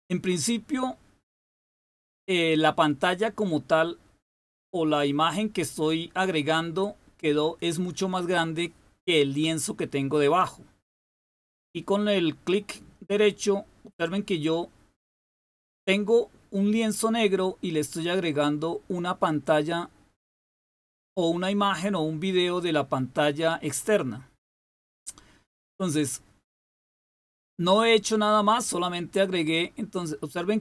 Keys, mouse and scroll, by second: 10.4-30.6 drag.